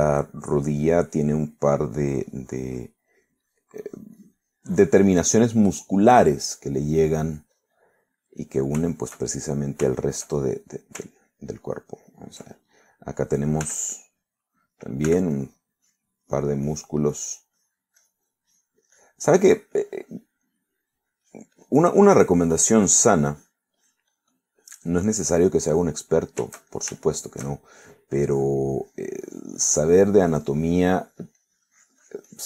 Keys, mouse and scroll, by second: 2.6-3.8 drag, 4.2-5.8 drag, 5.9 click, 6.6 middle click, 7.5-8.9 drag, 9.0-10.8 middle drag, 11.0 shift+click, 12.1-13.5 ctrl+drag, 14.7 f, 15.0 click, 16.1 f, 16.4 click, 16.9 click, 17.3 click, 18.2 click, 20.0-21.5 drag, 21.5 middle click, 22.3-24.8 drag, 25.8 click, 26.8 click, 27.3 shift+middle click, 28.1 shift+middle click, 29.2 shift+click, 29.9 click, 30.3-32.4 drag.